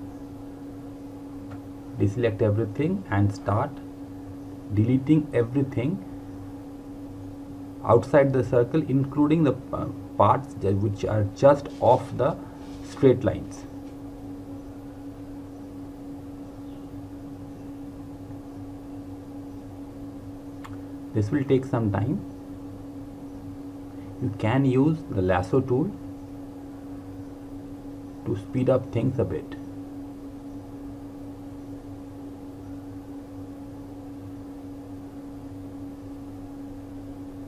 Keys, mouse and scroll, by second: 0.0 click, 5.9 click, 10.2 Delete, 12.9 click, 16.7 Delete, 23.9 click, 26.7 click, 35.5 Delete, 35.8-36.2 scroll up 1, 36.2 click, 36.9 Delete, 37.0-37.3 scroll down 1, 37.3 click.